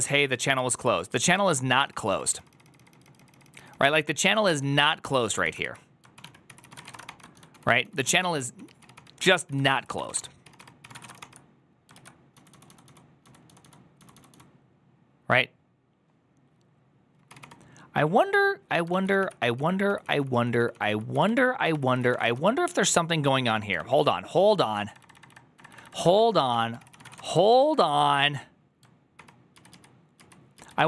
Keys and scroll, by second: 0.1 ctrl+u, 0.4 ctrl+u, 0.9 ctrl+u, 1.2 ctrl+u, 1.6 ctrl+u, 1.6 ctrl+d, 1.7 ctrl+d, 2.0 ctrl+d, 3.6 ctrl+d, 4.1 ctrl+a, 4.4 1, 5.3 ctrl+w, 5.5-14.2 typing, 6.0 ctrl+w, 6.1 ctrl+o, 6.3 ctrl+c, 9.5 ctrl+c, 9.6 ctrl+c, 11.8 ctrl+u, 18.8-27.7 typing, 23.6 ctrl+o, 29.0 ctrl+d, 29.4 ctrl+u, 29.9 ctrl+u, 30.2 ctrl+u, 30.4 ctrl+u.